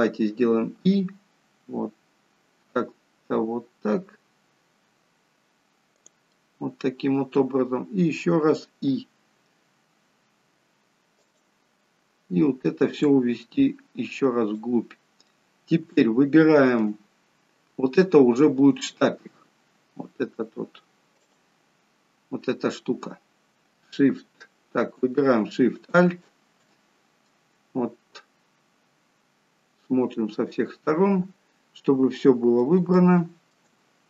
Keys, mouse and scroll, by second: 6.2 middle click, 13.0 click, 15.2 middle click, 16.0 shift+middle click, 17.1-18.5 scroll up 2, 18.5-18.8 scroll down 1, 21.2 click, 25.7 alt+shift+click, 26.9-27.3 scroll down 1, 27.3 middle click, 32.9 shift+middle click, 33.7-34.0 scroll up 2.